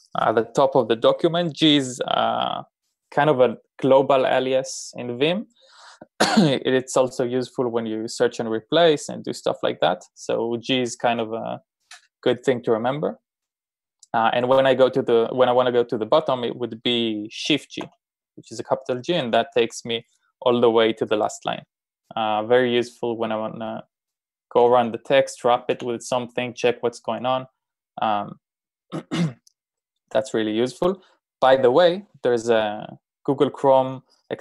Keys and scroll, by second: 18.1 shift+g, 24.6-26.0 typing.